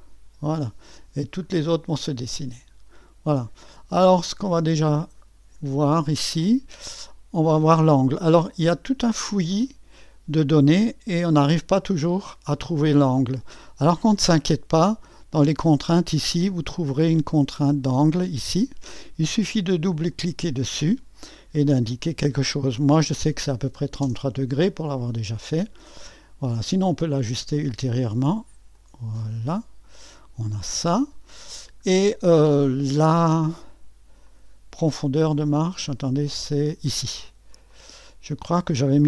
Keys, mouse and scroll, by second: 0.0-1.0 drag, 1.0-1.7 scroll down 1, 3.9-5.6 drag, 5.6-8.2 scroll up 1, 8.2-9.3 scroll up 1, 9.3-9.6 scroll up 1, 9.6 middle click, 9.7-11.2 drag, 14.7-17.4 drag, 18.4 click, 19.9-22.9 drag, 22.9 3, 23.3 KP_3, 24.0 Return, 26.0 middle click, 27.0-28.3 drag, 28.7-39.0 drag.